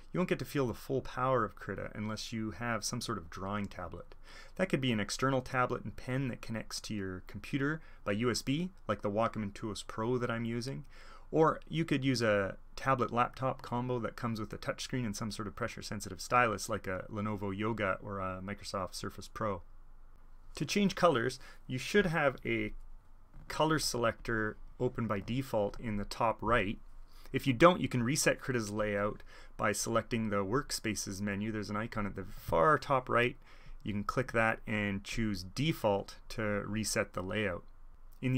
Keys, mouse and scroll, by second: 0.7 click, 1.1 click, 2.0 click, 3.0-7.8 drag, 10.4-13.4 drag, 13.7-17.2 drag, 24.0 alt+e, 24.1-25.7 drag, 25.7 alt+e, 30.4 alt+e, 30.6-32.2 drag, 32.2 super+middle click, 32.4 alt+e, 33.6 click, 35.0 click, 36.4-36.9 drag.